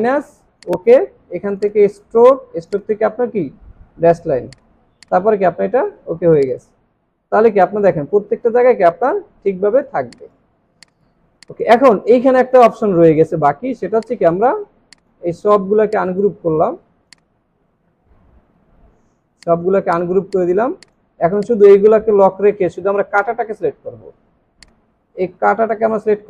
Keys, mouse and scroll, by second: 6.2 space, 7.1 alt+scroll up 3, 9.7 alt+scroll down 1, 10.1 space, 10.5 alt+scroll down 3, 10.8 space, 11.4 space, 12.0-12.4 alt+scroll up 3, 13.6 alt+scroll up 1, 13.9 space, 15.9 right click, 17.2 right click, 18.8-19.2 alt+scroll down 5, 19.4 space, 20.3 double click, 23.4 ctrl+2.